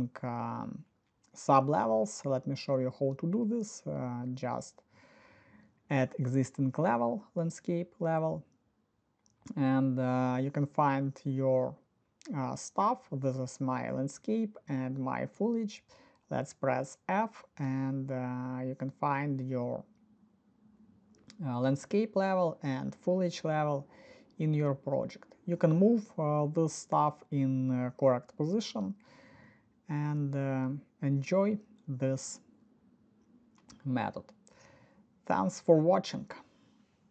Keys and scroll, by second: 12.5-14.9 typing, 22.8 f, 26.5-29.3 typing, 31.1-32.3 typing, 36.2 alt+s.